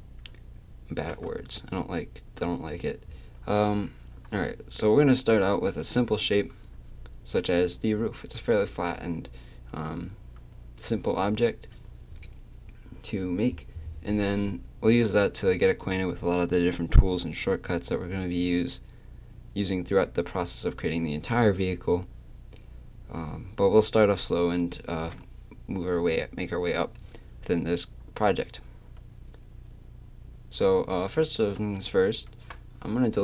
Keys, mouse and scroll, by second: 30.6 right click, 31.6 z, 33.0-33.2 middle drag.